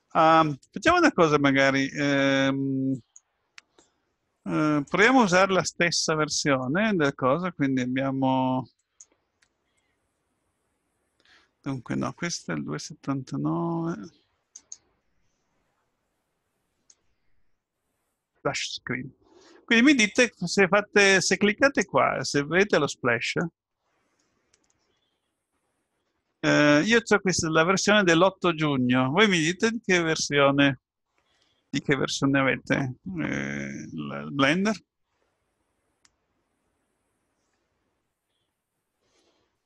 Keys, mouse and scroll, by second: 3.0 click, 4.8 click, 16.9 click, 21.6 click, 22.6 click.